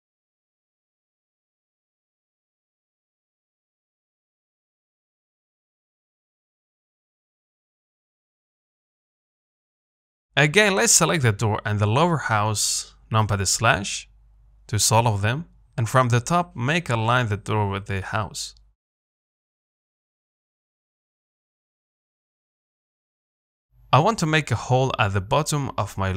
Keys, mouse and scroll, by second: 1.1-2.0 scroll up 1, 2.0 g, 4.7 s, 6.0 h, 7.0 ctrl+z, 7.9 g, 9.6-10.0 scroll up 5, 10.0-13.5 shift+middle drag, 13.5 shift+click, 14.3 KP_Divide, 15.0-15.6 scroll up 2, 15.6-16.1 scroll down 1, 16.1 ctrl+click, 17.1 KP_7, 17.9 z, 18.1-19.0 scroll up 2, 19.0 g, 21.3 z, 21.7-23.3 scroll up 4, 23.3 g, 24.6 z, 24.7 middle click, 25.2-25.7 scroll down 4, 25.7 shift+middle click, 26.1 scroll up 1.